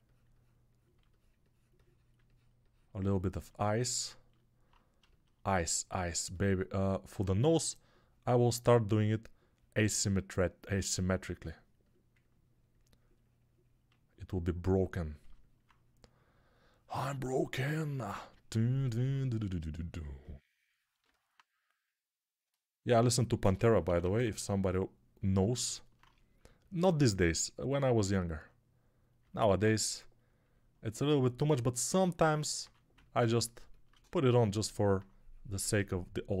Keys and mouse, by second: 15.3-16.9 alt+middle drag, 17.6-21.2 middle drag, 18.9 3, 23.3 g, 23.7 ], 23.9 ], 24.0 ], 32.5 3.